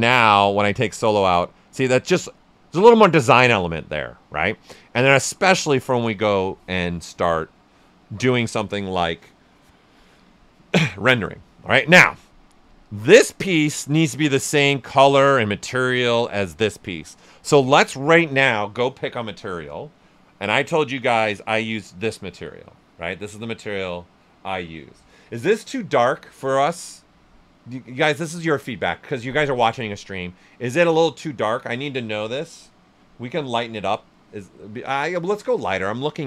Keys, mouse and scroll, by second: 0.4 click, 1.0-4.6 ctrl+right drag, 12.0-17.2 drag, 21.5 click, 25.0 click, 25.2 shift+f, 30.0 shift+f, 32.2 click.